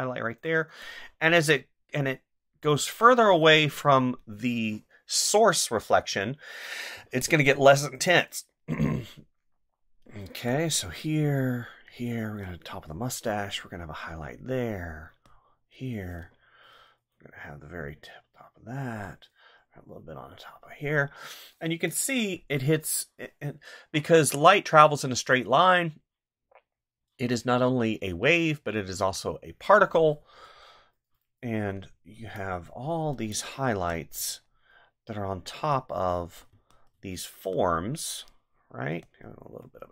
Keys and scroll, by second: 6.9 space, 33.7 space, 36.5 space.